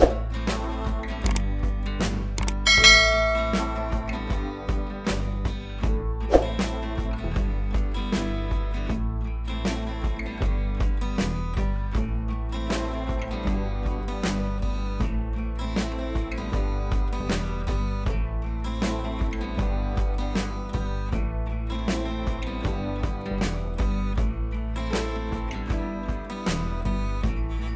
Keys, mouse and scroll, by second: 1.4 click, 4.2-5.2 scroll up 1, 5.7 click, 6.8 ctrl+i, 7.5 b, 8.1 ], 8.6 click, 10.1 [, 10.3 [, 10.4 click, 11.4 [, 11.5 [, 11.6 click, 12.6 ], 12.8 scroll down 1, 13.0 ], 13.1 ], 13.3-16.2 drag, 16.2 scroll up 1, 17.0 click, 19.7 click, 20.6-21.6 scroll up 1, 21.6 click, 23.7 ctrl+alt+shift+e.